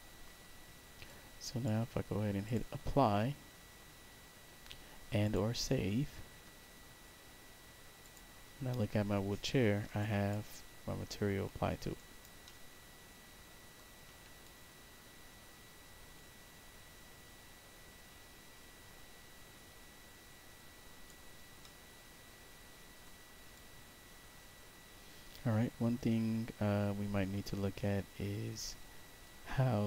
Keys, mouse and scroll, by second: 1.0 click, 2.4 click, 5.2 click, 7.9 click, 9.9 alt+click, 10.5 alt+right click, 11.9 alt+right click, 12.4-13.7 alt+middle drag, 14.3-21.0 alt+drag, 21.5-22.9 alt+middle drag, 23.4-29.8 alt+drag.